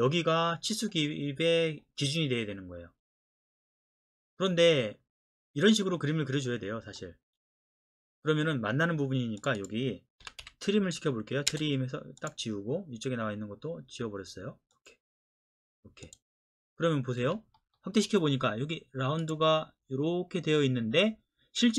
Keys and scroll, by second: 10.2 typing, 11.5 space, 17.2 Escape.